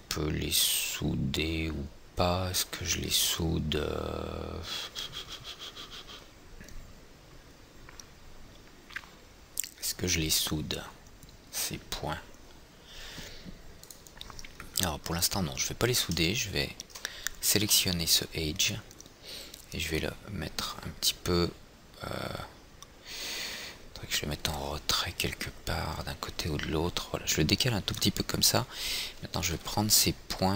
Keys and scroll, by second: 18.1 é, 30.0 &.